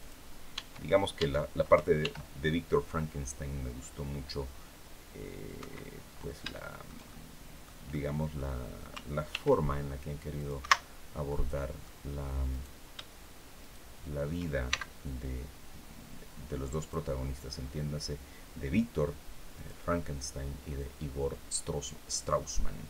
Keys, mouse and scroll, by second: 0.2 Tab, 1.7 ctrl+r, 5.3 Escape, 5.7-6.1 scroll up 1, 6.2 shift+middle click, 7.1 middle click, 7.6 middle click, 9.0 ctrl+r, 10.0 click, 10.3 Escape, 10.9 middle click, 12.2 right click, 13.3 shift+right click, 14.3 shift+x, 16.4 click, 19.2 click.